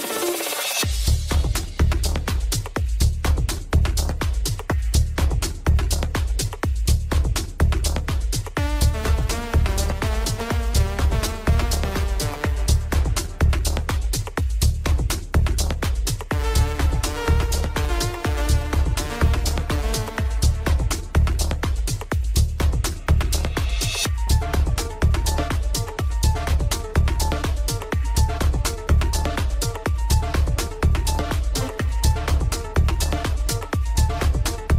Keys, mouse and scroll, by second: 0.6 scroll up 1, 0.6 Tab, 1.5 KP_1, 2.5-3.9 shift+middle drag, 3.9 shift+d, 10.5-10.9 scroll down 1, 10.9-12.0 middle drag, 12.0 Tab, 12.7-13.6 middle drag, 13.6-15.3 scroll up 2, 15.3 scroll up 1, 15.5 click, 16.3 scroll down 2, 16.6-17.6 middle drag, 17.6-18.0 scroll down 2, 18.0-20.0 middle drag, 20.0-20.5 scroll up 2, 20.5-21.9 shift+middle drag, 21.9 click, 23.1 click, 24.5-26.9 drag, 26.9-27.7 middle drag, 27.7-28.2 scroll up 2, 28.3-28.8 middle drag, 28.8-31.3 scroll up 1, 32.3-34.7 drag.